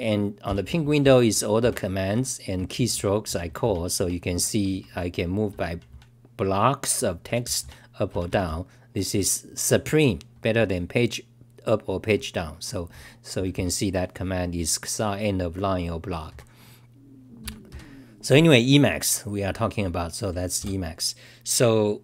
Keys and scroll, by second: 1.9-6.2 typing, 8.7-13.4 typing, 17.4 c, 17.7 t, 19.0-19.5 scroll down 8, 20.7 F5.